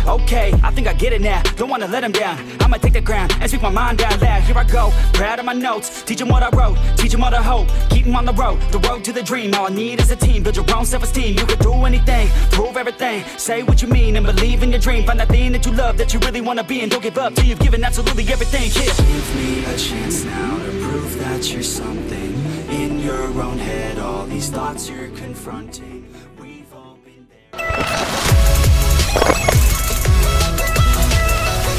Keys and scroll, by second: 3.3-6.7 typing, 8.1 space, 9.4-11.3 typing, 22.3 Escape.